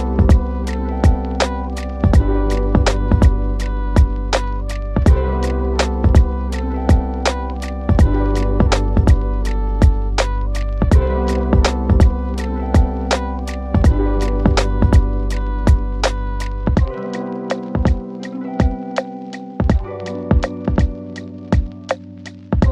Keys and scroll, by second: 8.3 shift+F2, 15.2 shift+Page_Up.